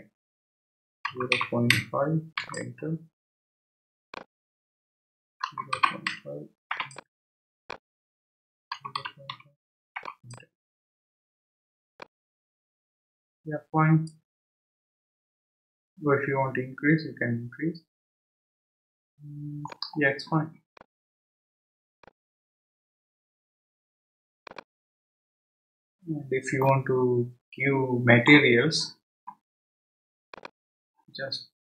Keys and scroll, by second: 0.8-2.2 typing, 2.4 Return, 5.2-6.6 typing, 6.7 Return, 8.5-9.8 typing, 10.0 Return.